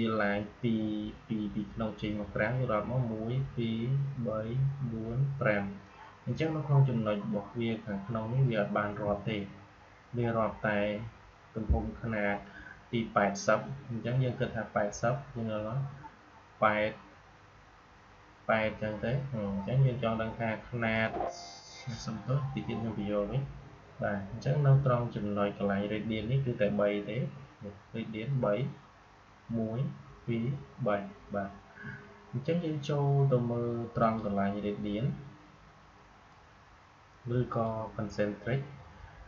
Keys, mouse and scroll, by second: 20.8 click, 33.9-39.2 drag.